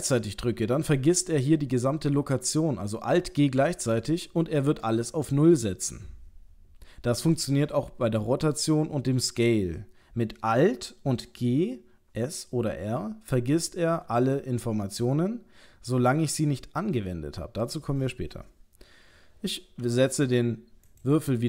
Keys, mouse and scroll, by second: 3.6 alt+g.